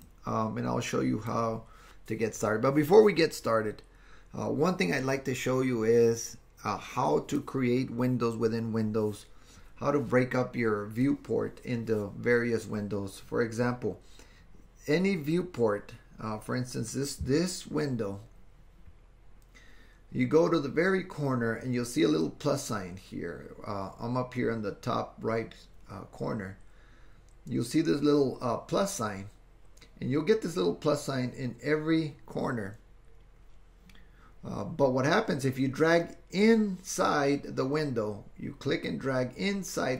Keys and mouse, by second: 0.2-1.3 drag, 38.9-39.9 drag.